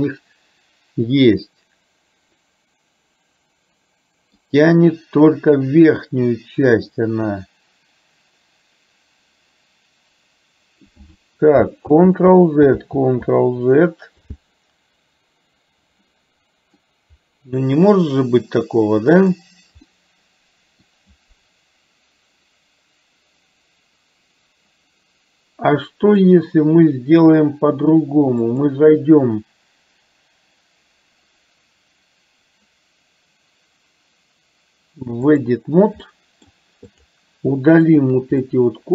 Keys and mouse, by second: 12.3 ctrl+z, 13.2 ctrl+z, 16.2-16.9 middle drag, 19.3 drag, 19.9-20.9 middle drag, 28.7-35.7 drag, 36.2 middle click, 37.0 click, 38.0 shift+click, 38.4 middle click.